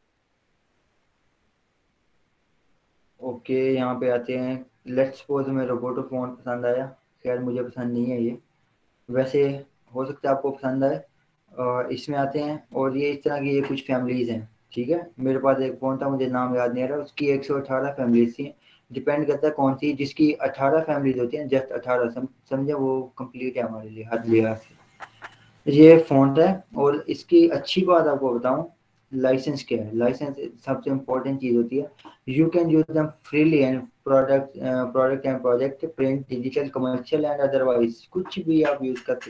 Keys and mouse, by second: 6.8 click, 11.2-21.0 drag, 22.3-29.2 drag, 27.5 typing.